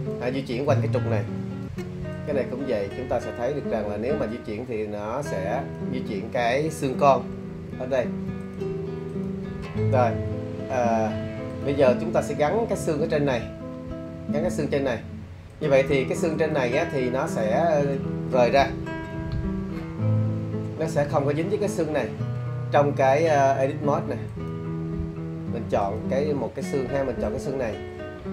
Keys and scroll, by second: 1.4 super+z, 7.7 super+z, 22.2 shift+d.